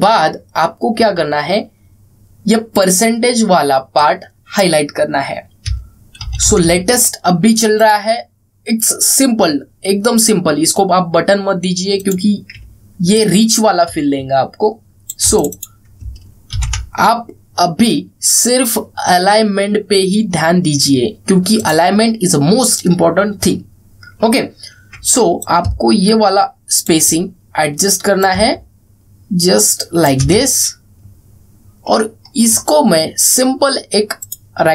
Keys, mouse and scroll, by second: 0.8-1.8 alt+scroll up 1, 3.4-5.3 drag, 6.9 ctrl+c, 8.5 click, 12.7 click, 13.8-16.0 alt+drag, 17.2 ctrl+v, 22.3 click, 25.1 alt+scroll up 1, 26.4-27.6 shift+drag, 29.2-30.8 shift+drag, 31.2 alt+scroll down 1, 32.2-32.7 alt+scroll up 1.